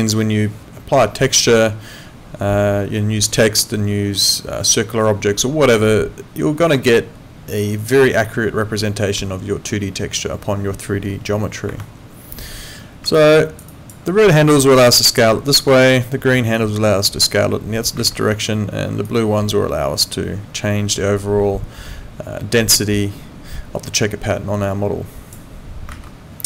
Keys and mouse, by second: 11.7 Escape, 13.2 alt+click, 15.7 ctrl+z, 16.6 click, 25.9 ctrl+z.